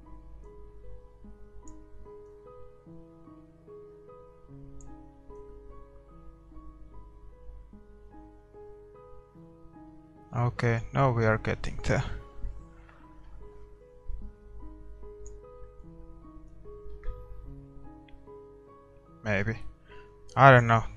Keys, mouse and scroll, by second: 0.9-4.4 drag, 5.8-7.2 drag, 17.0-18.2 drag.